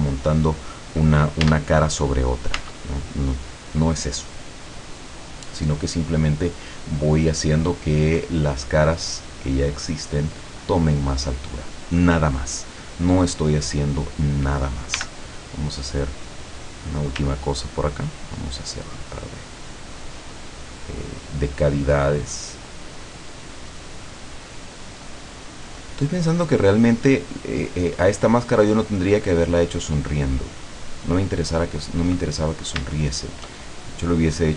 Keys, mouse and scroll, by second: 1.5 Tab, 2.6 Tab, 3.5-4.1 scroll down 2, 5.2 click, 6.1-6.5 scroll up 2, 6.5 scroll down 2, 7.0-8.4 middle drag, 8.6-10.0 drag, 10.3 click, 12.6 scroll down 2, 13.1-13.7 scroll up 4, 13.8 scroll down 2, 15.0 f, 16.7 click, 17.8-21.0 ctrl+drag, 21.3-23.1 ctrl+drag, 23.3-24.4 ctrl+drag, 24.7-28.7 ctrl+drag, 29.3 ctrl+click, 30.4-31.6 ctrl+drag, 31.7 ctrl+click, 32.3-32.7 ctrl+scroll down 2, 33.0 shift+middle click, 33.8 shift+scroll up 3.